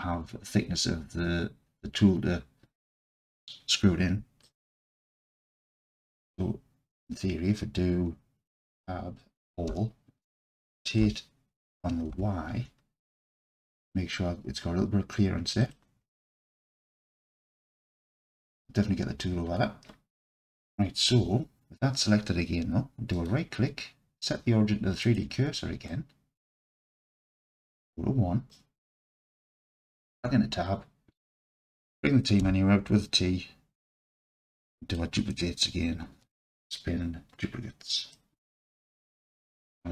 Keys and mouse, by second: 4.6 alt+click, 8.7 Tab, 9.7 a, 11.0 r, 12.1 y, 15.7 click, 16.2-18.2 alt+drag, 21.1 Tab, 23.2-25.2 drag, 25.2-25.6 right drag, 25.9-26.9 alt+drag, 27.5 KP_1, 28.5-29.3 drag, 30.2 Tab, 32.4 t, 35.0-38.2 drag.